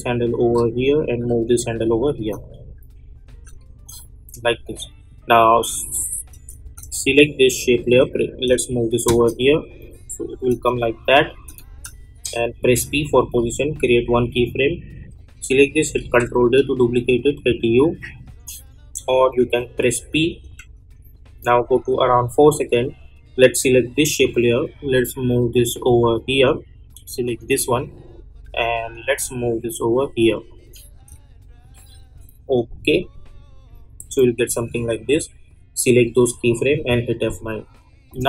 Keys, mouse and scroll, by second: 0.4-1.8 drag, 1.8 click, 2.4 space, 4.4 click, 5.5 space, 6.9 click, 8.4 [, 9.0 space, 12.6 p, 13.7 click, 15.4 click, 16.0 ctrl+d, 17.0 u, 19.4 p, 19.8 p, 20.4 p, 21.5-36.7 drag, 36.7 F9, 38.0-38.2 drag.